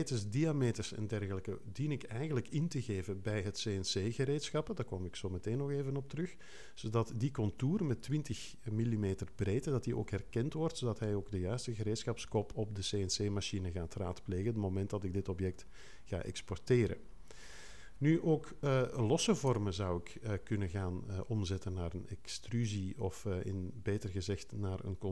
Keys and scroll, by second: 19.4 0.